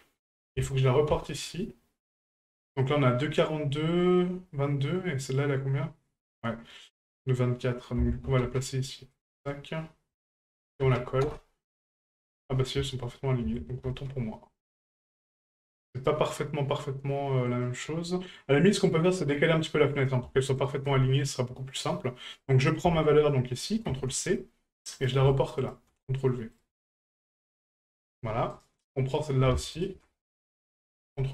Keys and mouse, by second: 5.2 right click, 10.5 ctrl+click, 13.7 ctrl+z, 15.9 right click, 17.5 right click, 20.0 right click, 20.4 alt+shift+right click, 20.6 alt+shift+right click, 22.4-24.4 drag, 25.0 right click, 25.3 alt+shift+right click, 25.6 alt+shift+right click, 26.6-28.0 ctrl+drag, 28.5 right click, 29.1 right click, 29.6 alt+shift+right click, 29.7 alt+shift+right click, 30.9-31.3 ctrl+drag.